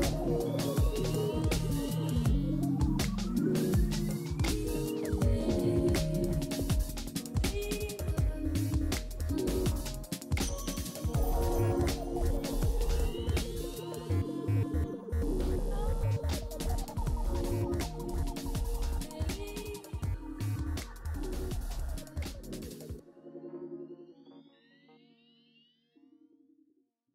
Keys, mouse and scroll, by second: 3.2-5.1 typing.